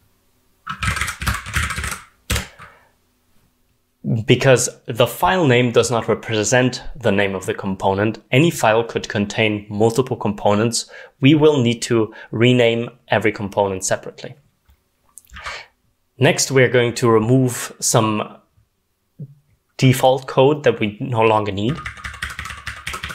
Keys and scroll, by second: 0.0-2.3 typing, 21.6-23.1 typing.